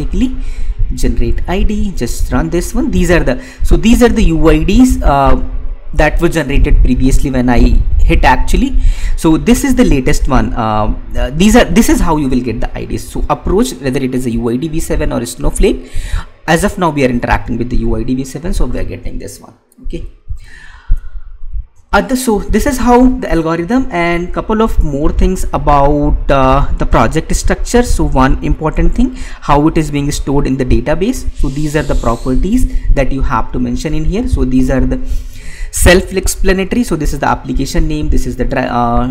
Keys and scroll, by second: 20.8 alt+Tab.